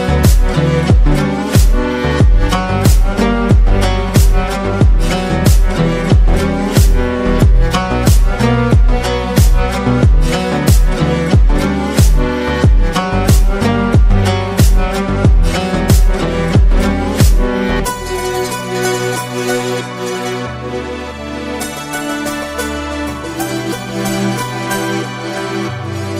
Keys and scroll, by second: 4.0 ctrl+d.